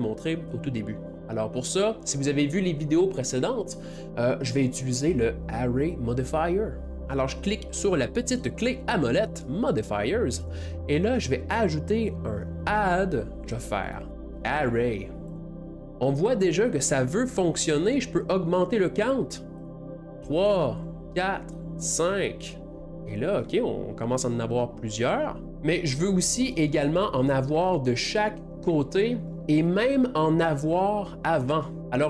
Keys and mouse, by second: 1.2-12.7 middle drag, 10.3 click, 12.7-15.5 drag, 15.5-18.3 middle drag, 19.2 middle click, 19.6 click, 20.0 middle click, 20.8-22.2 drag, 22.2-24.3 middle drag, 26.6 middle click, 27.4-27.8 middle drag.